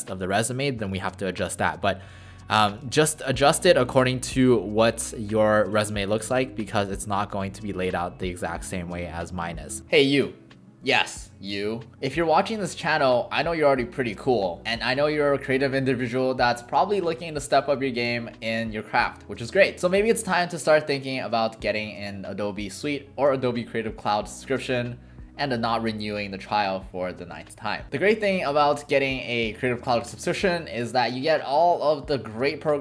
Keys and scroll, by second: 2.8 alt+space.